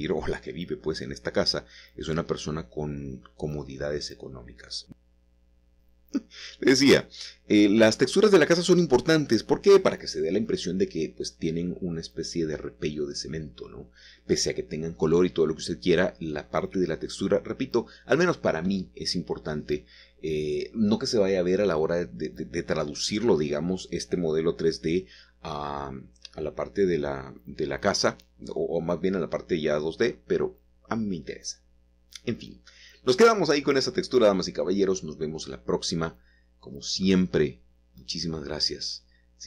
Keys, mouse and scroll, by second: 1.6-2.1 scroll down 1, 2.1-3.7 middle drag, 4.0 click, 6.4-7.8 drag, 10.9 middle click, 11.0-12.4 scroll up 2, 15.2-16.6 scroll down 2, 16.6-20.2 middle drag, 16.6 scroll down 1, 20.2 click, 20.7 shift+click, 21.7 shift+click, 23.8 shift+click, 26.2 click, 26.8-27.3 scroll down 1, 27.3-33.0 middle drag, 33.0-34.2 scroll down 2, 33.8-35.2 middle drag, 35.2-36.4 scroll up 2, 36.5-38.2 shift+middle drag, 38.5-39.2 scroll up 2.